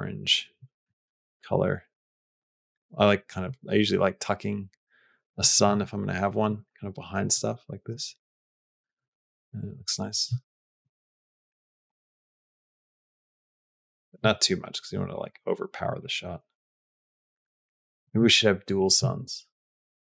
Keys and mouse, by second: 1.0 g, 5.5 s, 6.6 g, 7.7 g, 10.8 s, 11.7 g, 14.0 s, 15.4 g, 16.8 s, 18.1 shift+d, 18.9 s, 19.8 g.